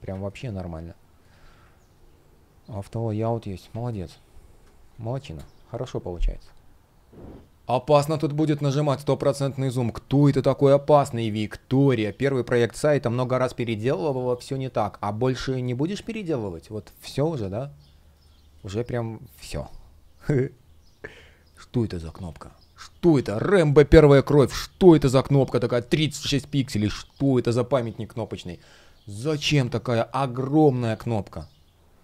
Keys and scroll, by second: 4.3 space, 7.4 space, 13.5 space, 17.7 shift+0, 18.0 space, 23.9 super+\.